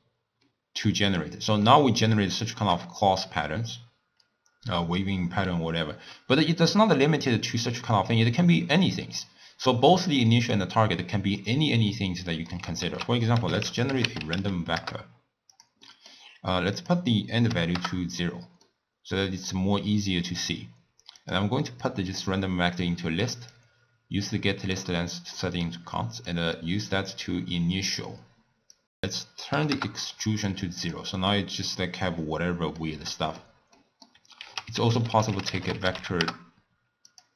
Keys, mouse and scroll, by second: 1.1 click, 1.7-4.1 middle drag, 4.1-4.7 scroll up 2, 4.7-7.0 middle drag, 7.0 click, 9.9 click, 10.5 click, 12.0 middle click, 12.9 ctrl+a, 15.9 middle click, 16.8-18.7 drag, 18.7-21.4 middle drag, 21.4 click, 21.8-23.6 drag, 25.3-26.3 middle drag, 26.3 click, 28.8 click, 28.8 middle click, 28.9-30.9 drag, 31.3-34.5 middle drag, 34.5 ctrl+a.